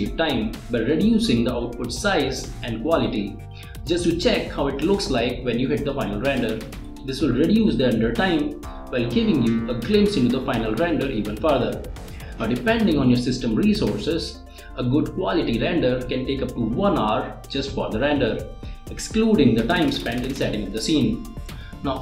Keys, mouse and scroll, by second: 0.2 space, 1.0 click, 2.1 click, 5.0 click, 5.9 click, 7.7 click, 7.9 click, 8.9 space.